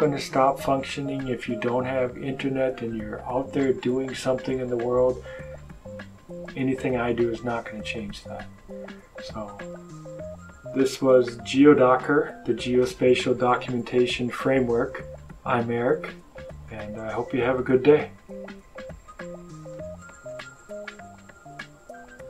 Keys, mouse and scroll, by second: 9.5 click, 19.5 click.